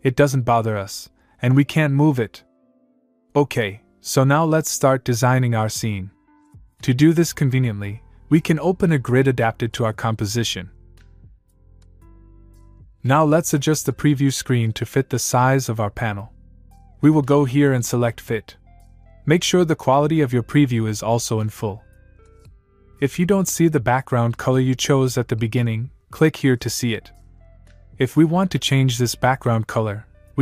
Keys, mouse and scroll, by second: 2.9-3.4 click, 9.9 click, 19.9 click, 28.0 click, 29.2 click.